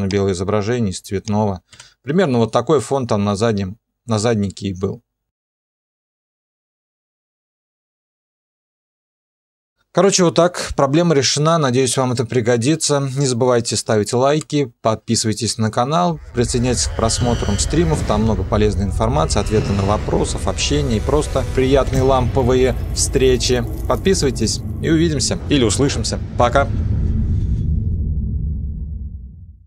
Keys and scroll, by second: 1.7 0, 9.7 0, 25.5 typing.